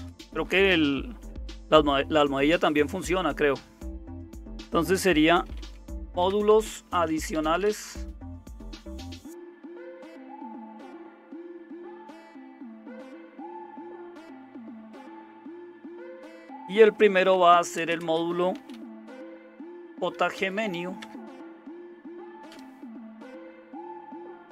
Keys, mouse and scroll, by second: 5.1-9.0 typing, 9.5 Return, 10.0 Up, 10.2 Up, 12.0-12.8 typing, 14.7-15.7 typing, 17.3-22.5 typing, 23.6 Return.